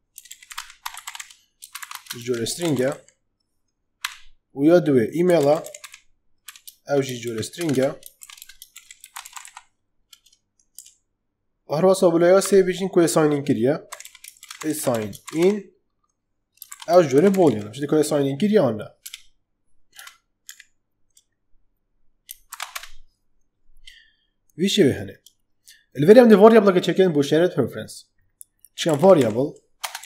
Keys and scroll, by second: 0.0-9.8 typing, 10.6 Escape, 12.4 ,, 13.6-17.9 typing, 18.9 BackSpace, 19.9 Return, 20.4 Right, 22.4 shift+[, 22.6 Return, 28.8-30.0 typing.